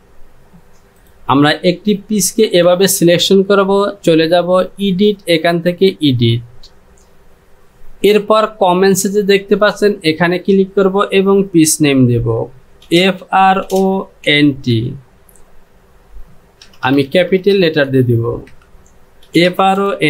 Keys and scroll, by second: 2.5 Home, 12.7-14.8 typing, 16.7-18.0 typing, 18.5 Caps_Lock, 19.0-20.0 typing.